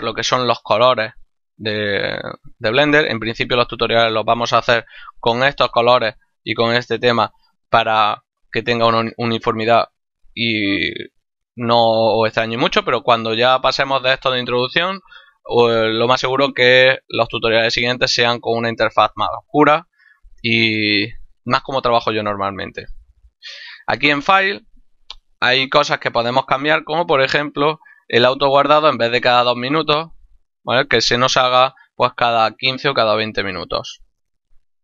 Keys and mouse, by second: 23.3 click, 26.7 middle click.